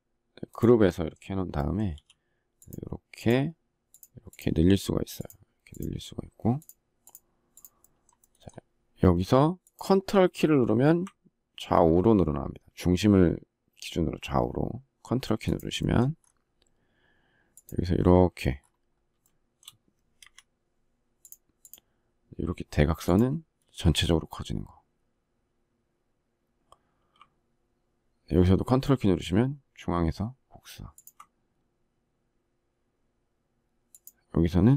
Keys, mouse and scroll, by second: 14.7 ctrl+click, 19.5 Escape, 30.2 ctrl+click.